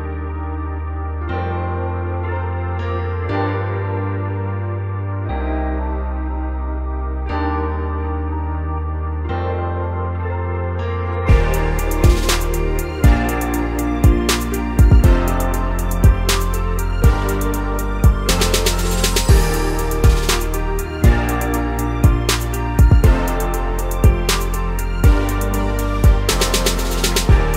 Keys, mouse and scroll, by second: 3.1 click, 5.3-5.7 scroll down 5, 5.7 scroll up 2, 5.9 f, 7.5-8.7 drag, 8.7 middle click, 9.0 click, 9.6 middle click, 9.9 click, 10.5 middle click, 10.7 click, 11.4 middle click, 11.7 click, 12.3 middle click, 12.6 click, 13.2 middle click, 13.4 click, 14.0 middle click, 14.3 click, 14.8 middle click, 15.3 shift+click, 15.7-17.2 middle drag, 17.2 Tab, 17.4 scroll down 2, 17.5 middle click, 17.8 scroll up 2, 19.2 scroll up 1, 19.3 click, 19.7 Tab, 19.8 scroll down 4, 20.0-22.9 middle drag, 22.9-27.5 drag.